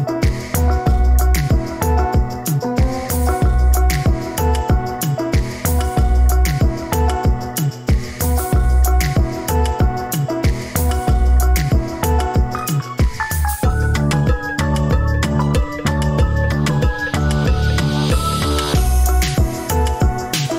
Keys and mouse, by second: 6.4-7.5 middle drag, 11.6 ctrl+r, 16.3-17.8 middle drag.